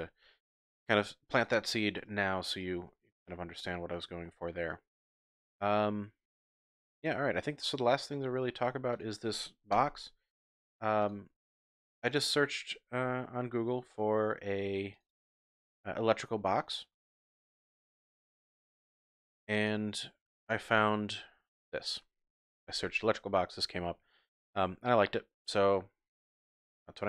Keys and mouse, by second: 0.2 Tab, 2.2 shift+drag, 2.8-3.2 drag, 3.5-3.9 shift+drag, 3.7 typing, 4.7-7.1 drag, 7.3-7.7 shift+drag, 7.7 shift+middle drag, 9.0-9.7 typing.